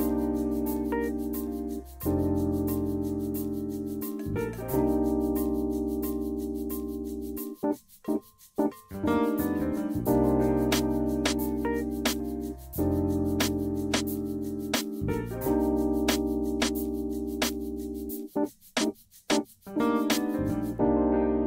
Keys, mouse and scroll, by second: 1.7-2.2 scroll down 1, 2.2-2.5 scroll up 1, 3.4-4.2 scroll down 2, 4.2-5.5 scroll up 1, 14.3 click, 15.1 drag, 16.0 click, 17.0 middle click, 17.9 scroll up 1, 18.2 middle click, 19.2 scroll down 1, 19.3 middle click, 20.7 middle click.